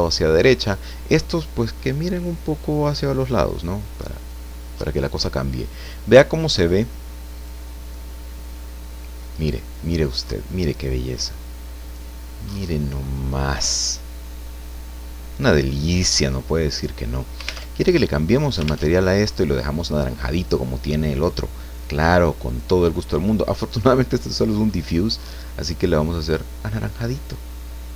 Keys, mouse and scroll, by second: 0.5 scroll down 2, 2.9-3.9 drag, 4.1-4.4 scroll up 2, 4.4 middle click, 4.7-5.0 scroll down 2, 5.0 middle click, 6.6 click, 7.3 click, 10.2-13.6 middle drag, 14.7 scroll up 1, 17.9 alt+Tab, 19.0 alt+Tab, 19.9 right click, 22.5 click, 23.1 click, 25.7 click.